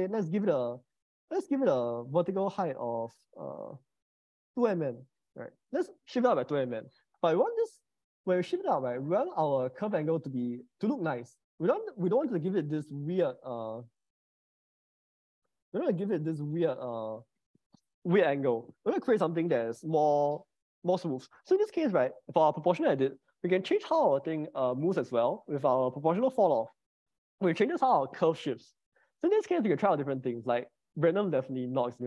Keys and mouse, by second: 1.4-2.4 drag, 3.4-5.3 drag, 4.6 0, 12.5 middle click, 14.8-16.9 drag, 19.5-21.7 drag, 26.3-31.2 drag.